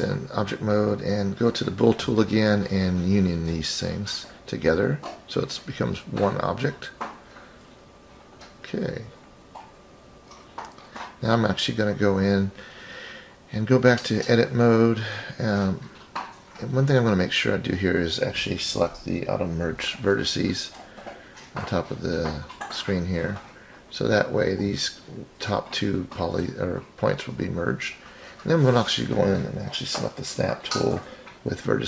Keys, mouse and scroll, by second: 0.2-1.4 scroll down 5, 4.2-5.0 drag, 6.8 shift+click, 8.3 click, 9.8 click, 11.9 KP_3, 11.9 KP_1, 14.1 click, 15.1-15.9 scroll up 5, 15.9-16.9 scroll down 4, 16.2-16.9 scroll up 1, 16.9-17.2 scroll down 1, 18.0-18.8 drag, 20.0 click, 22.2 click, 23.1 scroll up 4, 27.1 click, 29.8-30.9 drag.